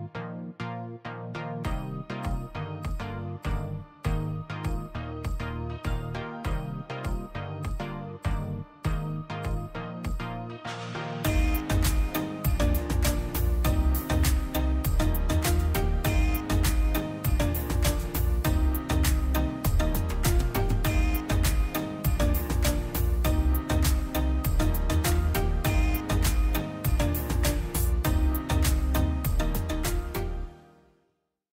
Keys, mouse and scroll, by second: 5.8 click, 15.9 click, 20.4 click, 24.3 click, 28.9 click.